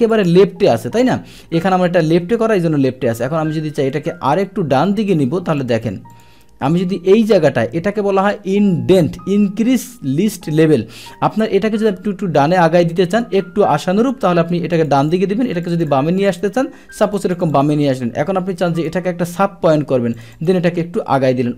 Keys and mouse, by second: 0.1 click, 1.6 click, 5.0 click, 5.6 click, 6.1 click, 6.7 click, 14.8 click, 15.0 click, 15.7 click, 16.2 click, 17.0 click, 17.1 click, 17.3 click, 17.5 click, 18.8-20.2 drag, 20.4 click.